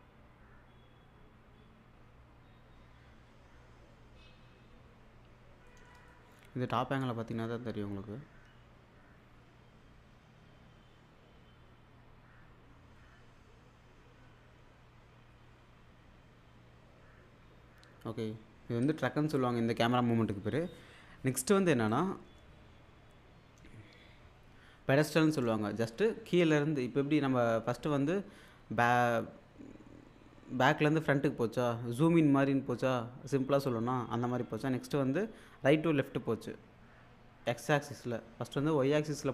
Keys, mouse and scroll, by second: 5.7 middle click, 7.8-8.5 scroll down 1, 18.9 space, 21.9 click.